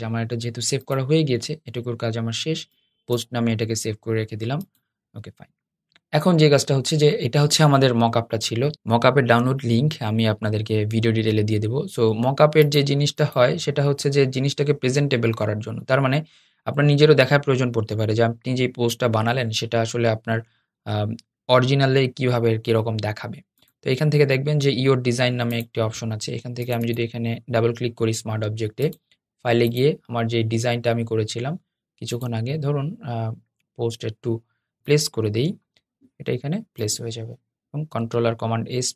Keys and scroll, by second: 37.7 super+s.